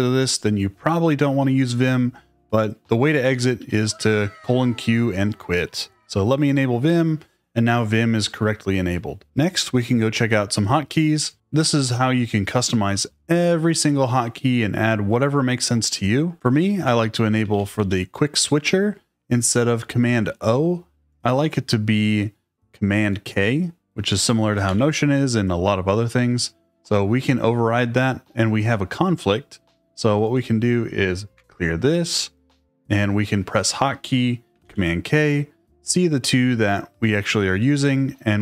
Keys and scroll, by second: 3.2 shift+;, 3.5 q.